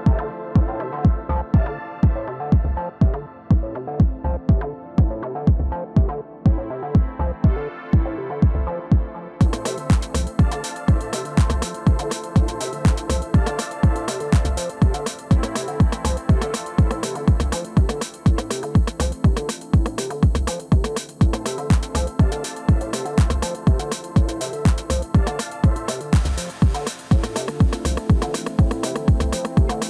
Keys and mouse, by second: 3.0 KP_3, 4.0-5.0 middle drag, 5.0-6.8 drag, 7.0 ctrl+i, 10.2-21.3 drag, 11.7 ctrl+z, 11.9 ctrl+z, 21.2 middle click, 21.8 alt+m, 22.5-25.8 drag, 26.2 middle click, 28.7-29.7 middle drag, 29.1 i, 29.7-29.8 drag.